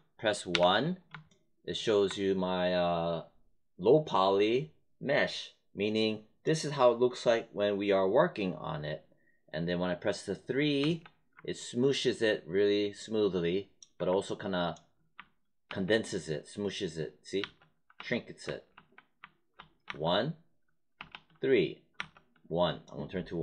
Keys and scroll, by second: 0.4 1, 10.7 3, 15.0 1, 15.6 3, 17.3-21.9 typing.